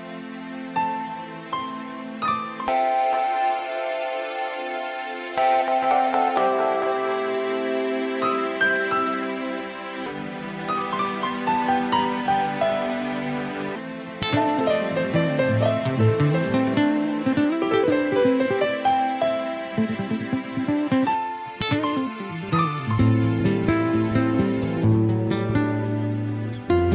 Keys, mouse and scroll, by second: 1.0 e, 17.5 ctrl+z.